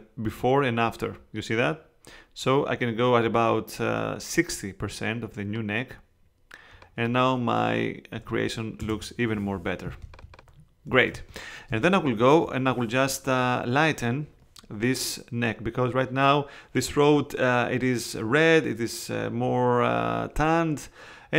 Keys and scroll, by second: 7.9-8.8 typing, 10.1 space.